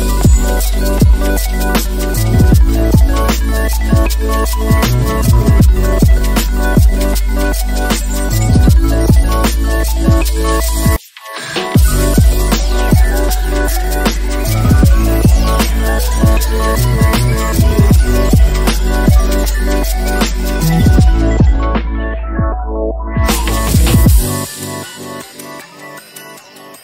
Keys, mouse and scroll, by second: 0.1 click, 1.1 middle click, 1.3 click, 1.6 Tab, 2.4 click, 3.7 click, 5.5 click, 6.5 click, 7.3 middle click, 8.6 middle click, 8.9 click, 9.4 right click, 10.5 click, 11.3 click, 13.2 ctrl+click, 13.8 ctrl+click, 13.9 ctrl+middle click, 14.2 click, 15.7 click, 15.8 click, 16.3 click, 16.7 click, 18.2 Tab, 18.2 click, 18.5 middle click, 18.8 middle click, 19.0 click, 19.4 click, 19.5 middle click, 19.7 middle click, 19.9 click, 20.2 middle click, 20.3 middle click, 20.6 middle click, 21.0 middle click, 21.2 middle click, 21.4 middle click, 21.9 click, 22.4 middle click, 22.7 middle click, 22.9 middle click, 23.3 middle click, 23.8 middle click, 24.4 click, 24.4 middle click, 24.6 click, 24.8 middle click, 25.5 middle click, 25.8 click, 26.0 click, 26.1 middle click, 26.5 shift+middle click.